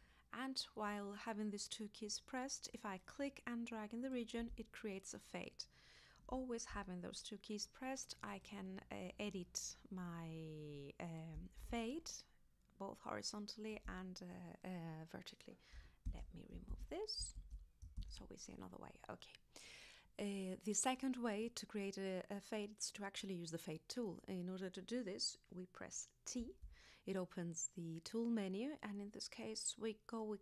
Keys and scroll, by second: 16.1 super+z, 26.4 t.